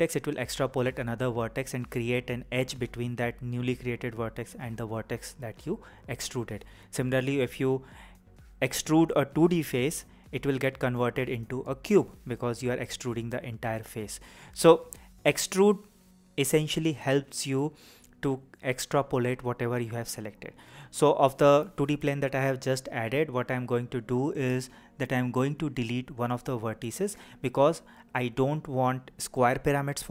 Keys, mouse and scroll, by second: 1.3 click, 14.4 click, 18.7-30.1 right drag.